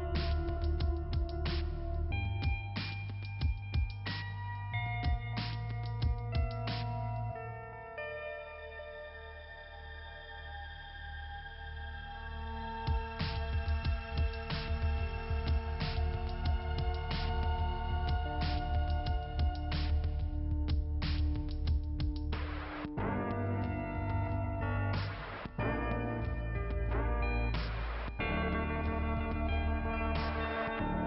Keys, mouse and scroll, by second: 0.0 right click, 0.6 click, 1.6 click, 3.6 click, 4.4 click, 4.8 click, 4.9 double click, 6.0 double click, 6.7 click, 7.3 click, 11.4 click, 12.5 click, 13.4 right click, 14.3 click, 15.0 click, 16.4 click, 17.3 click, 17.8 click, 19.0 click, 29.3 click, 30.4 click.